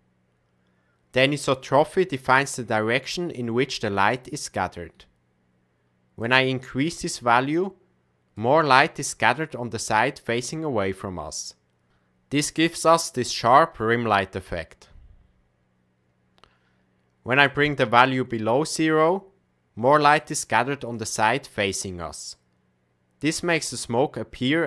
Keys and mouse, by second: 6.2-8.4 drag, 17.4-20.1 drag.